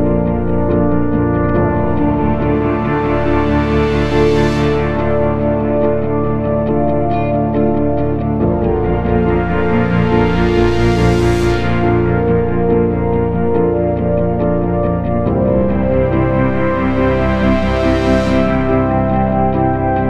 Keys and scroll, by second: 16.3 F3.